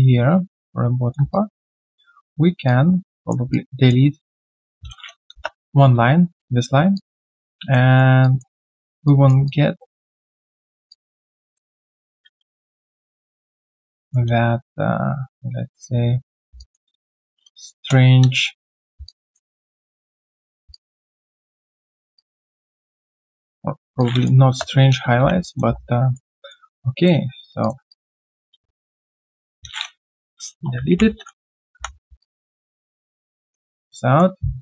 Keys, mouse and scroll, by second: 0.5 shift+click, 1.3 alt+click, 2.6 shift+click, 3.5 alt+click, 6.9 alt+click, 7.2 alt+middle click, 7.5 alt+click, 7.9 alt+right click, 8.2 alt+click, 9.4 alt+click, 10.3 shift+click, 10.9 alt+click, 12.0 ctrl+z, 12.7 shift+click, 13.6 alt+click, 15.3 shift+click, 16.6 alt+click, 17.7 alt+click, 19.0 alt+click, 19.9 shift+click, 20.7 alt+click, 22.0 alt+click, 24.4 Return, 24.9 scroll down 1, 25.3 q, 25.4 alt+click, 25.8 right click, 26.3 alt+middle click, 27.6 shift+click, 27.9 alt+click, 30.9 ctrl+Delete, 31.7 3, 32.2 alt+click, 32.5 alt+right click, 32.8 alt+click, 33.1 alt+middle click, 33.4 alt+click, 33.8 q, 34.3 right click, 34.3 q, 34.4-34.6 scroll down 1.